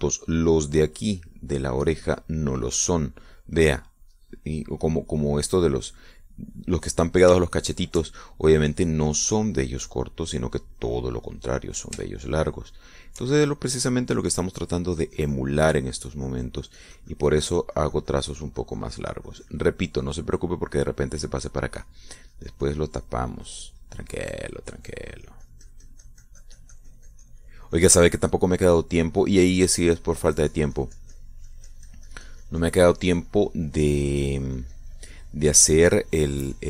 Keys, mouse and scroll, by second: 9.1 shift+middle click, 9.8-13.2 drag, 13.4 shift+middle click, 14.1 shift+click, 15.5 click, 16.4-21.1 drag, 21.2 click, 22.4 middle click, 23.2-29.4 drag, 30.4-32.8 drag, 32.9-36.6 drag.